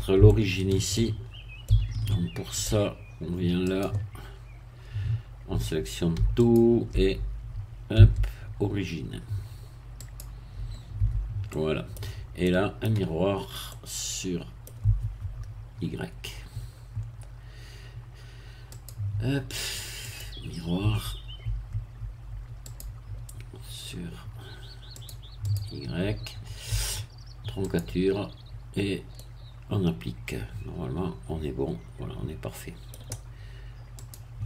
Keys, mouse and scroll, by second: 0.2 shift+middle click, 1.2 shift+scroll up 2, 1.6-2.8 shift+middle drag, 3.7 click, 6.4 alt+click, 6.9-8.0 alt+scroll up 2, 8.0-8.6 scroll up 1, 8.0 q, 10.0 click, 11.0 Tab, 11.5 middle click, 12.0 scroll down 1, 12.4-15.0 middle drag, 18.7 click, 20.0 click, 22.7 click, 25.0 click, 25.5 click, 27.6 click, 29.2-33.1 middle drag, 34.0 click.